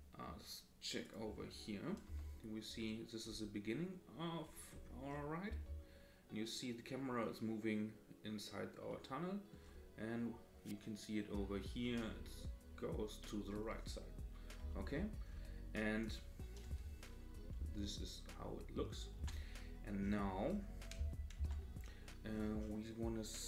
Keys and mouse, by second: 1.0 click, 2.1 KP_0, 5.5 space, 8.9-9.6 middle drag, 13.4 middle click, 14.6 space, 16.0 click, 16.6 KP_0, 17.6 space, 19.2 space, 21.0 space, 21.4 space.